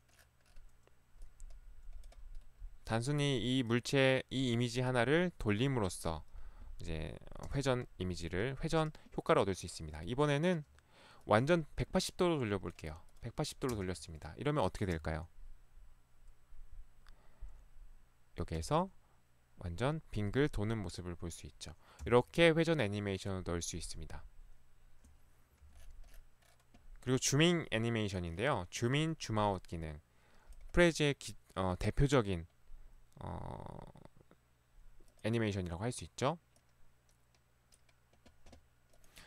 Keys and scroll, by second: 13.8 space, 15.0 Right, 18.6 Right, 22.2 Left, 25.7 Escape.